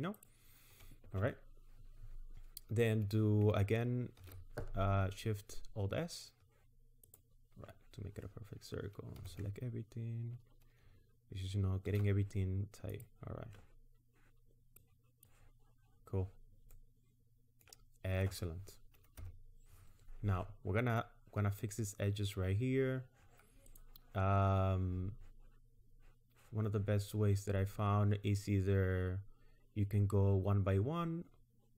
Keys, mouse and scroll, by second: 0.2 ctrl+click, 4.2 alt+shift+s, 9.2 a, 11.9 alt+shift+s, 14.8 click, 16.7 middle click, 19.2 KP_1, 23.7 click.